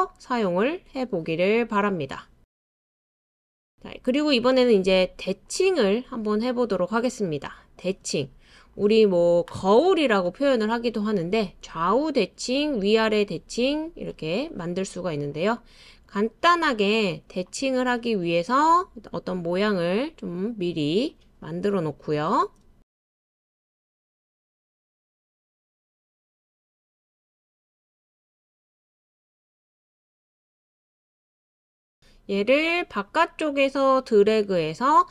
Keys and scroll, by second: 3.3 super+c, 3.6 super+v, 18.9 super+c, 19.1 super+v.